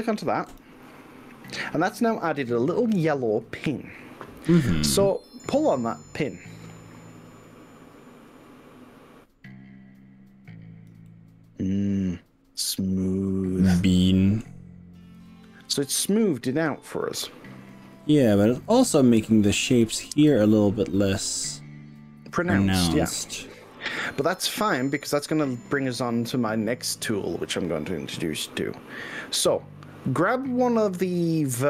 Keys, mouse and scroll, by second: 0.5 click, 3.0-5.9 middle drag, 6.6 click, 11.1-14.4 middle drag, 15.2 click, 18.0-19.3 middle drag, 20.4 drag, 27.7-31.6 middle drag.